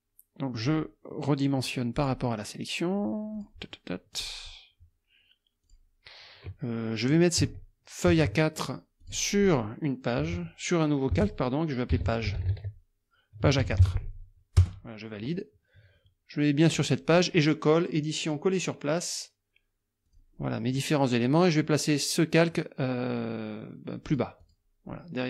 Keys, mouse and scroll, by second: 0.6 click, 2.0 click, 3.3 click, 4.1 click, 5.7 click, 8.1 ctrl+x, 9.0 click, 10.2-13.8 typing, 14.6 Return, 16.7 click, 18.3 click, 20.1 click, 24.1 click, 24.5 click.